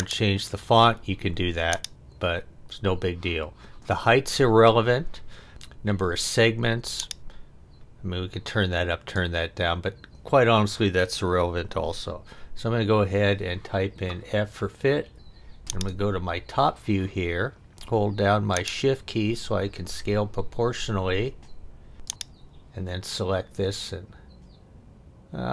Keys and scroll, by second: 12.5 f.